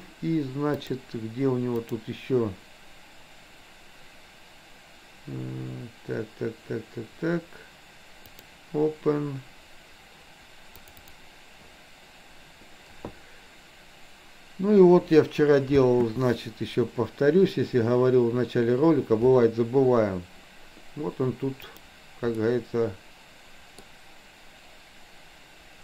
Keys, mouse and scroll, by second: 0.9-8.6 drag, 15.7 space, 21.6 click, 22.4-23.9 middle drag.